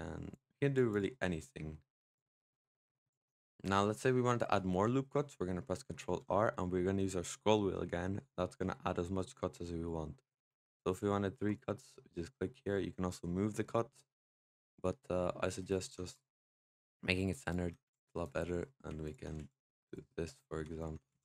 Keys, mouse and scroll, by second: 0.2 click, 0.8 click, 1.0 middle click, 2.0 click, 2.7 click, 3.4 middle click, 3.7-5.9 scroll up 1, 5.9 ctrl+r, 16.0 click, 17.3 alt+click, 17.7 s, 18.9 alt+click, 19.2 s, 20.7 alt+click, 21.0 s.